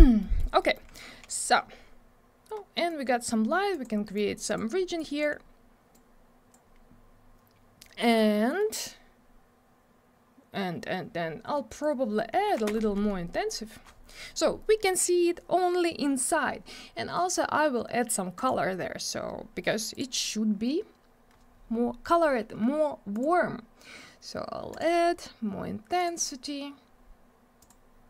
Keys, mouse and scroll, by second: 0.2 middle click, 0.6 middle click, 2.8 click, 3.7 click, 4.1 click, 5.0 click, 5.9 click, 7.8 middle click, 11.6 click, 12.5 2, 12.6 Return, 18.3 click, 19.9 click, 23.1 click, 24.7 click, 27.6 click.